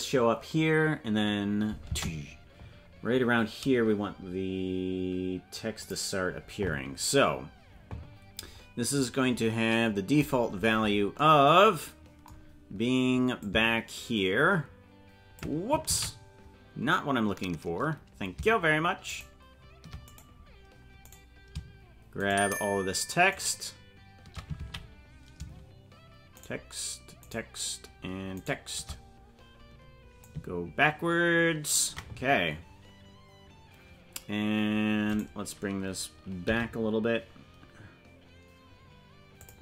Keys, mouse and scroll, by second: 5.8 click, 10.3-11.2 scroll down 15, 13.4-15.4 drag, 16.4 ctrl+z, 19.2 shift+right click, 20.1 right click, 22.3 shift+right click, 25.1 ctrl+z, 26.4 shift+right click, 30.2-31.7 drag, 35.0 right click, 36.4 g.